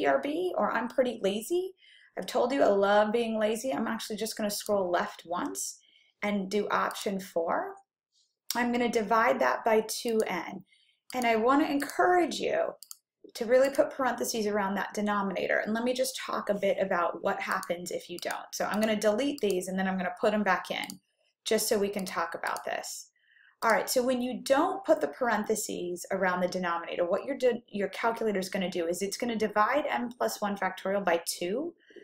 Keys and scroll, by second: 4.7 Left, 7.0 4, 10.4 /, 11.4 (, 12.1 2, 12.9 x, 13.9 ), 17.8 Left, 18.6 Left, 20.0 Left, 20.9 Delete, 22.3 Right, 23.1 Right, 23.7 Delete.